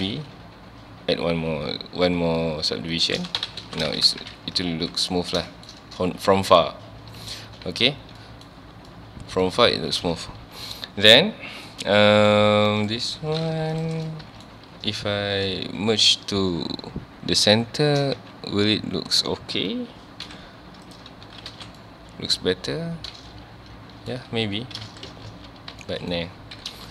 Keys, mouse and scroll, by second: 3.0 shift+click, 3.2 alt+a, 3.4 Tab, 3.6 alt+a, 3.9 ctrl+s, 4.2 KP_1, 4.8 scroll down 1, 5.5 shift+middle drag, 5.8 scroll up 1, 6.5-6.9 scroll down 1, 7.7 ctrl+s, 7.8-8.2 scroll up 1, 8.2-8.7 middle drag, 8.7 scroll down 1, 8.9-9.5 middle drag, 9.5 scroll up 1, 9.6 Tab, 10.4 2, 11.5 scroll down 1, 11.7-12.6 middle drag, 12.6 2, 12.8 click, 13.5 3, 13.7 click, 14.1-14.5 middle drag, 14.5 shift+x, 15.0 x, 21.3 Tab, 21.5 alt+a, 21.6 scroll down 1, 21.8-24.2 middle drag, 24.2 scroll up 1, 24.5 Tab, 24.9 ctrl+z, 25.8-26.6 middle drag, 26.6 KP_1.